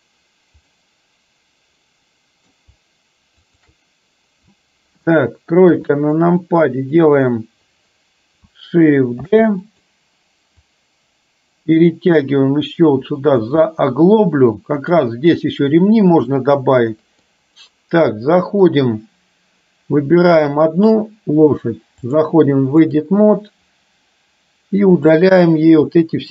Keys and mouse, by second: 0.8-2.6 middle drag, 5.8 KP_3, 9.3 shift+d, 10.8-13.5 drag, 13.8-15.0 middle drag, 16.5-17.4 middle drag, 18.3 middle click, 20.4 click, 22.1-23.1 drag, 25.9 shift+click.